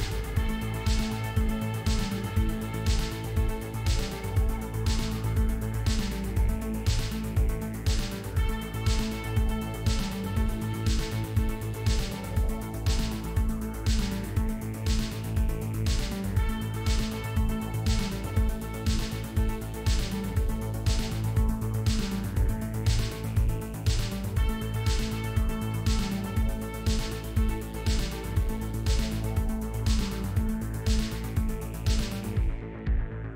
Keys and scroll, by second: 7.6 s.